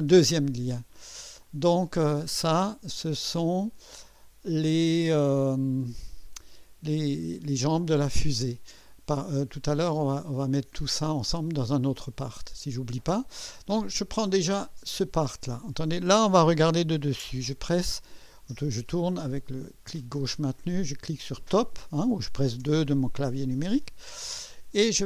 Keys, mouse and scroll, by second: 14.7 click, 18.8-20.5 drag, 21.3 click, 22.6 2.